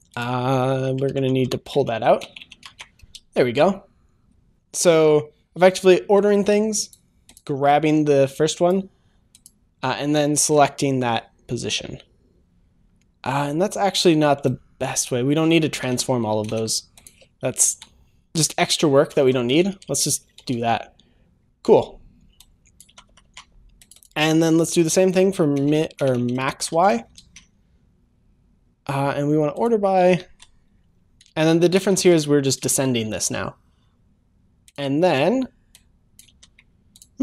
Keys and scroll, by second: 3.1 ctrl+s, 3.2 ctrl+s, 19.5 Return, 20.4 Return, 20.5 ctrl+s, 22.9 ctrl+c, 23.1 ctrl+v, 23.3 ctrl+v, 27.1 ctrl+s, 32.6 Return, 33.0 ctrl+s, 36.2 ctrl+c.